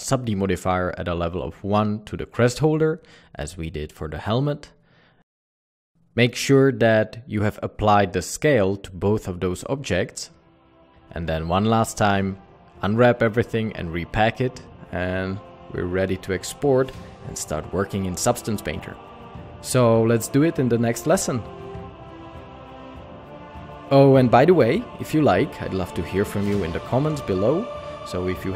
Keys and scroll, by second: 4.8 alt+a, 5.2 Tab, 8.9 a.